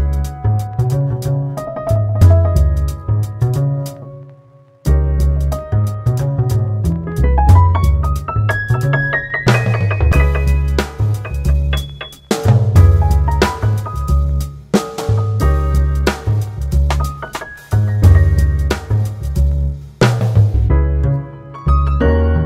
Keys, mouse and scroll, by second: 2.3 Tab, 3.4 middle click, 3.9 Tab, 6.6 ctrl+r, 9.7-13.2 drag, 13.2 ctrl+r, 15.6-18.6 drag, 19.4 ctrl+z, 22.0 ctrl+r.